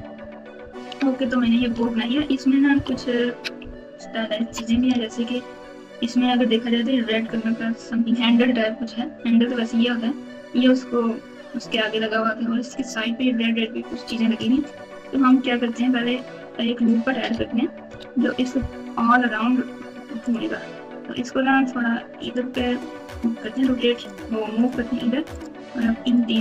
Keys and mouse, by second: 0.5 KP_Multiply, 0.6 Tab, 1.1-4.4 typing, 4.6 KP_Add, 15.1 click, 15.4 Tab, 18.1 ctrl+r, 24.5 alt+click, 25.3 alt+shift+click, 26.0 alt+shift+click.